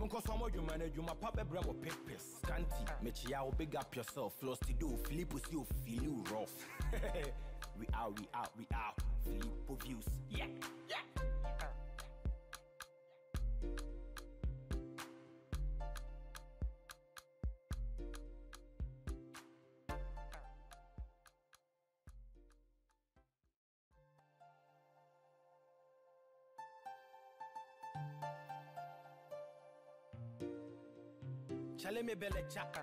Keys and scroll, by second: 29.1 ctrl+t.